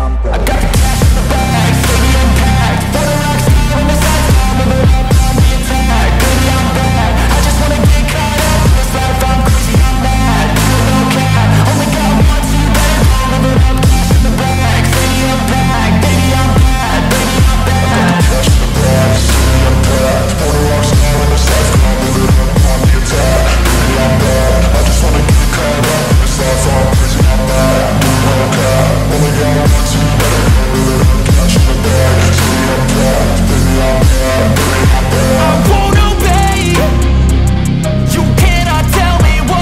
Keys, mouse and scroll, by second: 5.5 scroll up 1, 5.6 alt+click, 8.6 alt+click, 11.6 alt+click, 15.1 alt+click, 16.7 alt+click, 20.3 scroll down 1, 20.5 alt+click, 22.2 alt+middle click, 22.4-24.8 scroll up 1, 24.9-26.0 scroll up 1, 26.3 shift+click, 27.3-28.3 typing, 29.0 double click, 33.0 BackSpace, 34.5 shift+click, 35.6-36.6 typing, 37.4 alt+middle click, 38.3 shift+click.